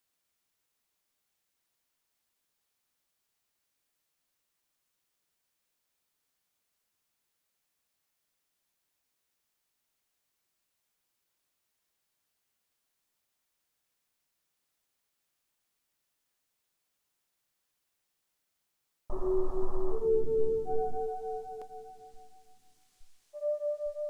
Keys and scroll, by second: 1.9 Escape, 2.1 ctrl+z, 3.8 Escape, 19.0 4, 21.6 3.